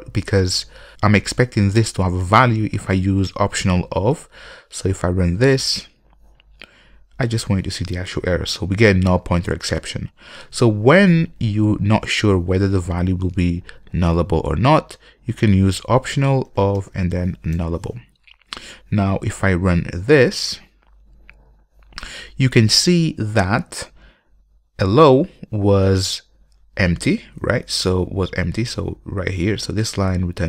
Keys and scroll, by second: 5.8 ctrl+F5, 17.7 Return, 20.2 ctrl+F5.